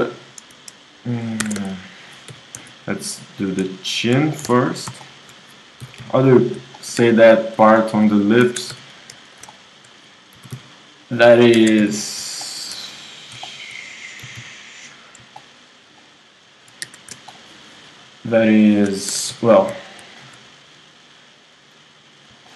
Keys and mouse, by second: 1.4 ctrl+Tab, 1.7-6.8 drag, 2.3 g, 4.4 w, 6.4 g, 7.0 KP_1, 8.7 ctrl+Tab, 10.4 g, 11.6 ctrl+Tab, 12.1-13.7 drag, 14.2 g, 16.9 KP_1, 19.1 ctrl+Tab, 19.6-22.5 drag, 22.5 middle click.